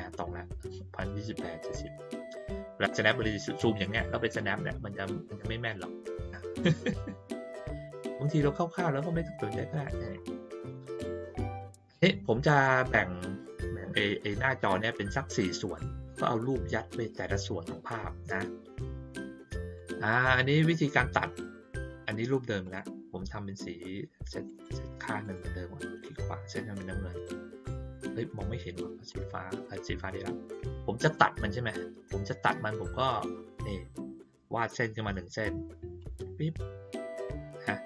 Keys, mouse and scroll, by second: 3.0-3.8 ctrl+scroll down 2, 5.1-5.6 ctrl+scroll up 4, 5.9 ctrl+middle click, 5.9-6.6 ctrl+scroll down 6, 6.1 ctrl+middle click, 6.4 ctrl+middle click, 7.3 middle click, 8.3-8.7 ctrl+scroll up 1, 8.7-9.1 ctrl+scroll down 1, 9.5 middle click, 10.4 ctrl+scroll down 1, 10.5 ctrl+middle click, 11.9-12.6 middle drag, 19.7 click, 20.1 click, 22.6 click, 24.4 right click, 25.2 click, 29.0 click, 35.9 click.